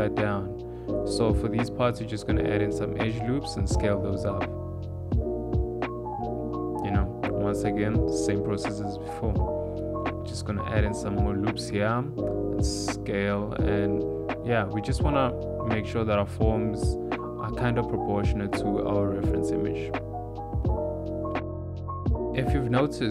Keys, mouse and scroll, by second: 0.6 ctrl+r, 2.7 click, 2.7 s, 3.3 click, 4.4 s, 7.6 ctrl+r, 7.9 s, 9.9 shift+middle click, 10.6 ctrl+r, 11.8 s, 13.4 ctrl+r, 15.4 s, 17.2 ctrl+r, 18.3 s, 20.3 click, 20.8 shift+middle click, 21.4 shift+middle click, 21.7 click, 22.5 click.